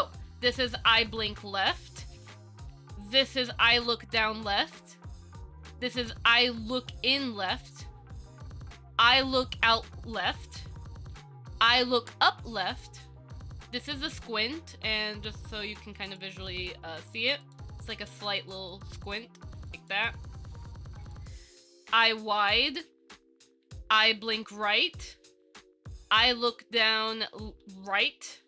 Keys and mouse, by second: 2.9 Down, 5.5 Down, 16.3 click, 17.2 click, 17.6 click, 18.0 click, 18.3 click, 18.6 click, 18.9 click, 19.8 click, 20.0 click, 20.4 click, 21.2 click, 23.8 Down, 25.3 Down.